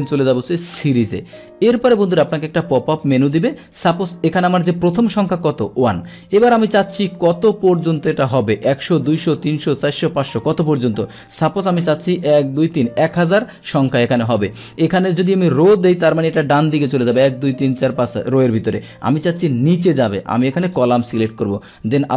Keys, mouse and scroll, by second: 0.9 click, 2.2-3.3 drag, 6.4 click, 7.0 click, 20.7 click.